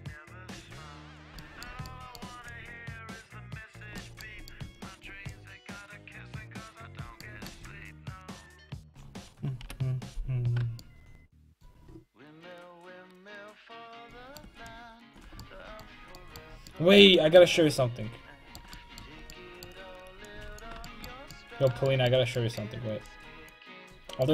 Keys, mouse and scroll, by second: 0.4 click, 1.8-7.3 middle drag, 2.5-4.0 drag, 5.3-7.3 drag, 7.2 right click, 7.5 middle click, 7.7-9.6 drag, 9.6 KP_5, 15.4-16.5 middle drag, 20.3-23.2 middle drag, 20.8 click, 23.1-24.3 drag.